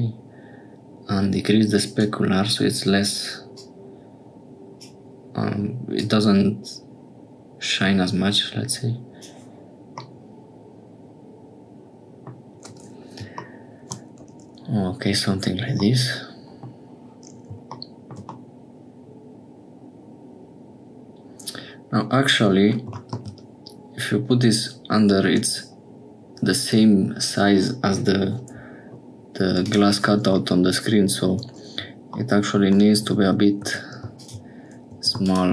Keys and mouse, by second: 3.5-4.9 drag, 6.0-9.2 drag, 10.0-12.4 middle drag, 13.8 middle click, 15.9 middle click, 18.3-22.7 middle drag, 22.7 click, 30.4 click, 33.0 Tab, 33.6 2, 34.9 2.